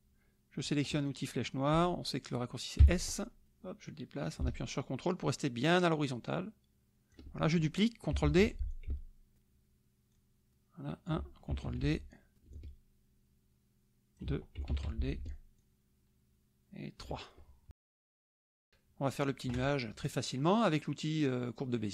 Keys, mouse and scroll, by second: 2.8 s, 3.4-7.3 drag, 8.2 ctrl+d, 8.7-11.4 ctrl+drag, 11.7 ctrl+d, 12.5-14.3 ctrl+drag, 14.7 ctrl+d, 15.6-17.6 ctrl+drag, 17.7 KP_Subtract.